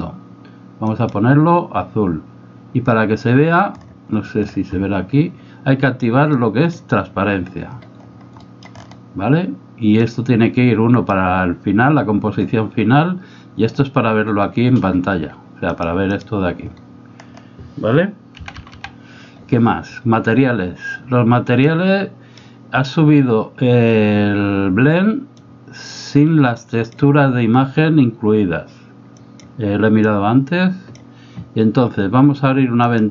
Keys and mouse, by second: 8.5 middle click, 10.1-11.3 drag, 15.8 click, 16.2 click, 18.4 v, 18.8 v, 21.6-22.7 drag, 25.5-27.0 drag, 29.2 click, 30.2-31.2 drag.